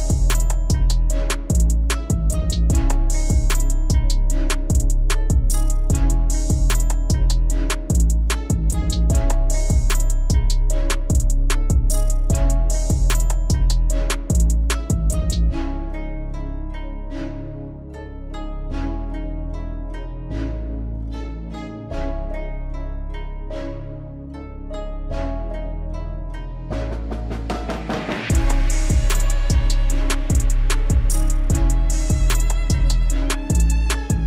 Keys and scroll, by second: 6.7 alt+w, 15.6 alt+w, 25.2 alt+w, 32.3 alt+w.